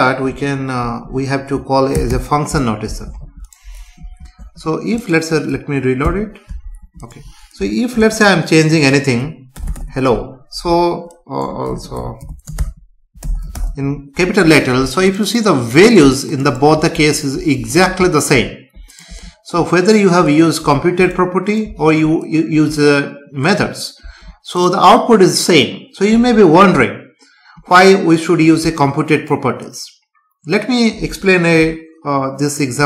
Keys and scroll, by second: 1.1 Left, 2.9 ctrl+s, 4.2 ctrl+s, 6.0 F5, 8.0 BackSpace.